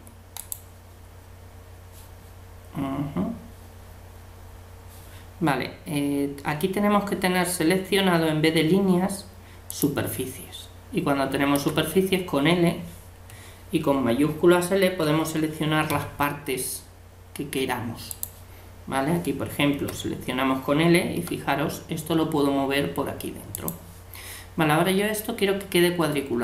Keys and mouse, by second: 9.7-11.6 drag, 11.6 l, 14.7 shift+l, 15.9 g, 19.8 l, 21.2 g.